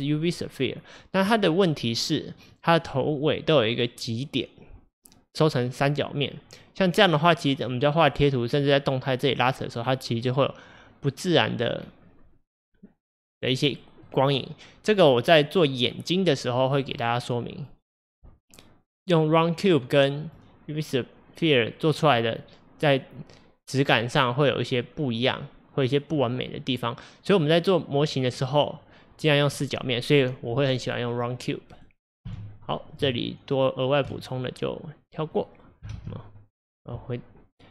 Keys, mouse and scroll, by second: 2.6-4.3 scroll up 7, 4.4-5.7 scroll down 2, 5.7 scroll down 1, 6.2-7.7 scroll down 3, 7.7-8.5 scroll up 2, 8.5-9.6 scroll up 1, 10.4-11.8 scroll down 3, 11.8-12.4 scroll down 1, 12.4-13.3 scroll down 1, 13.3-16.4 middle drag, 17.0 click, 17.6 click, 19.3 click, 20.2 click, 28.0 click, 28.4 click, 31.1 click, 31.8 click, 32.3 x, 33.1 x, 35.4 click, 36.0 alt+x, 36.6 click.